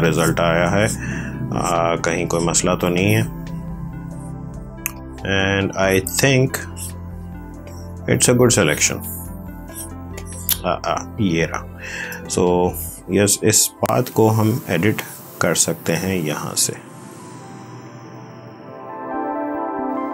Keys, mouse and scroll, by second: 12.7 click.